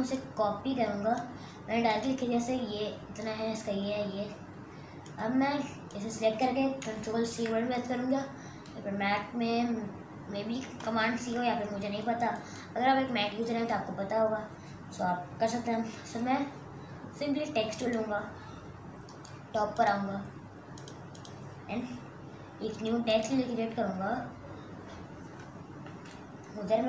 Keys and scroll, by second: 7.4 ctrl+c.